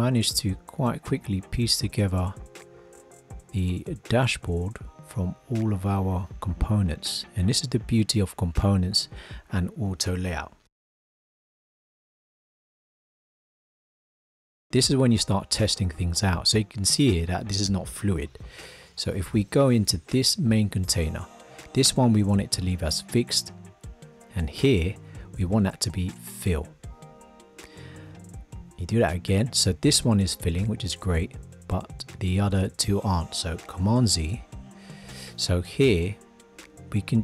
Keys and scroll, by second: 18.2 super+z, 33.8 super+z.